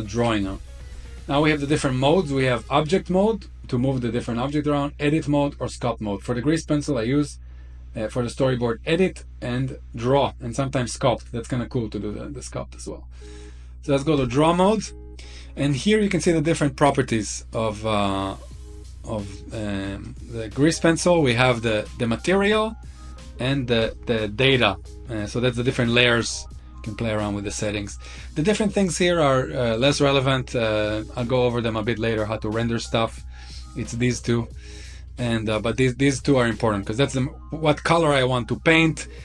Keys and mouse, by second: 2.3-14.1 drag, 16.6 click, 19.3 click, 23.5 click, 33.4 click, 33.9 click, 35.4 click, 36.1 click.